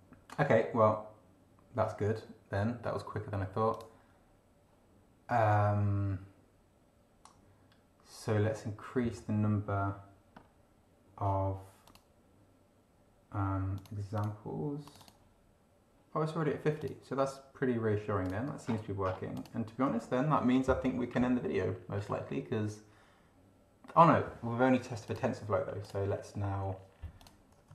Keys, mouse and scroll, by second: 3.7 click, 10.3 scroll up 2, 11.8 click, 13.7 click, 14.2 click, 14.9 click, 16.8 click, 18.2 click, 18.6-19.3 scroll down 2, 19.3 click, 22.0 scroll up 1, 25.1 click, 25.8 click, 27.2 click.